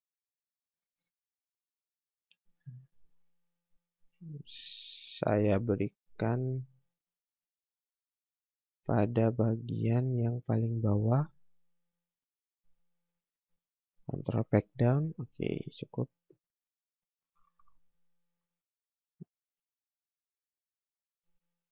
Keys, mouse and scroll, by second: 0.1 click, 2.7 scroll down 1, 3.0 scroll up 1, 3.5 click, 14.3 ctrl+Page_Down, 16.3 scroll up 1, 17.2 click.